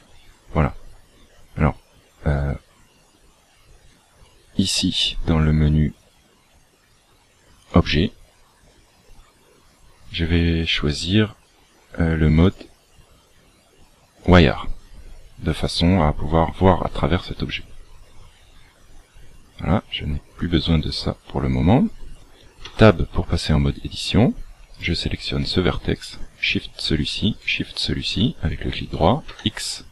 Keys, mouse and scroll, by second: 0.3 scroll up 1, 4.2 click, 7.6 click, 8.7-9.1 scroll down 1, 12.3 click, 20.3 click, 22.5 Tab, 25.9 shift+right click, 29.2 x.